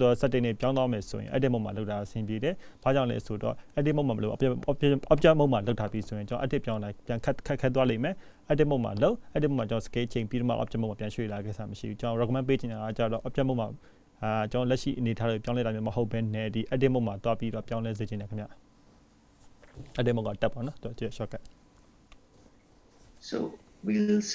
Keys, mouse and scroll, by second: 1.0 q, 2.9 click, 4.8 click, 5.1 click, 12.3-13.4 scroll down 1, 13.4-14.4 scroll up 1, 21.1 click.